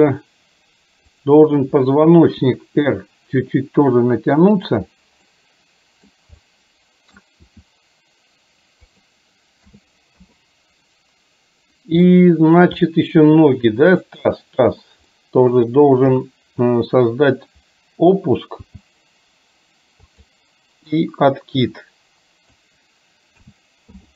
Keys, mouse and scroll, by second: 1.3 click, 2.5 r, 5.3 middle click, 6.5 middle click, 7.5 r, 9.8 a, 10.3 i, 12.2 middle click, 14.0 click, 15.2 middle click, 16.2 KP_3, 18.7 g, 21.2-22.7 drag, 23.4 a, 23.9 i.